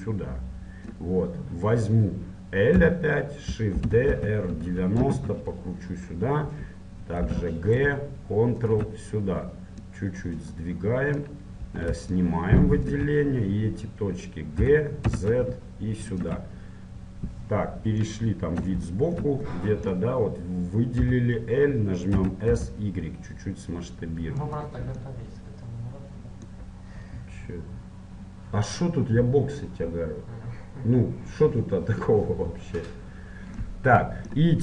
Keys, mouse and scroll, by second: 2.9 l, 3.9 shift+d, 6.2-8.2 middle drag, 7.4 g, 10.0-14.8 drag, 14.8 g, 18.2-20.8 middle drag, 21.2 l, 21.4 middle click, 22.4 s, 25.2 middle click.